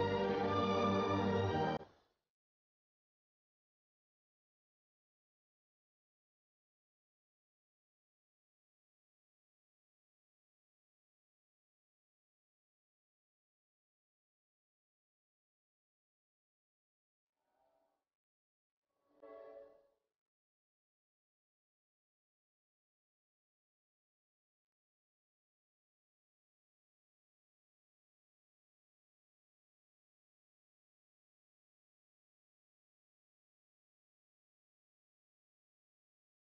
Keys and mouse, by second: 3.2-6.6 middle drag, 10.2 s, 15.8 Tab, 20.4 Tab, 24.8-26.1 right drag, 26.1-27.7 drag, 28.0 ctrl+r, 32.2-35.2 middle drag, 35.5-36.5 right drag.